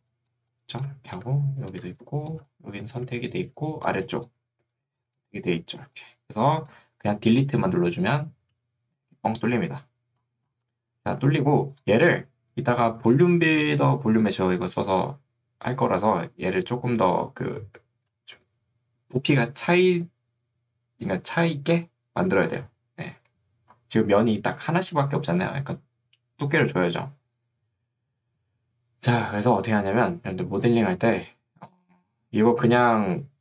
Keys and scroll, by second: 0.1 1, 0.5 3, 2.1 1, 2.5 3, 4.1 1, 5.9 3.